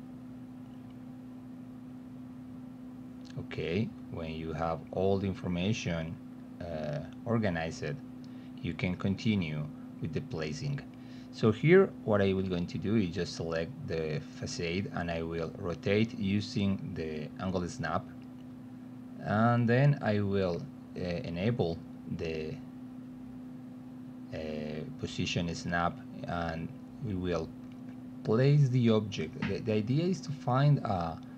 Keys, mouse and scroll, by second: 0.0 click, 1.8 click, 3.2 click, 4.0 click, 5.2-7.1 typing, 7.1 click, 8.1 click, 8.4 click, 9.2 click, 9.6 click, 11.1 click, 11.7 middle click, 12.6 click, 13.1 e, 13.3 middle click, 14.0 alt+middle click, 15.0 click, 16.2-18.8 drag, 19.2 w, 20.3 middle click, 21.7-22.8 drag, 22.9 alt+middle click, 24.1 alt+middle click, 25.6 click, 27.2-28.3 drag, 28.6-29.7 alt+middle drag, 30.3-31.3 alt+middle drag.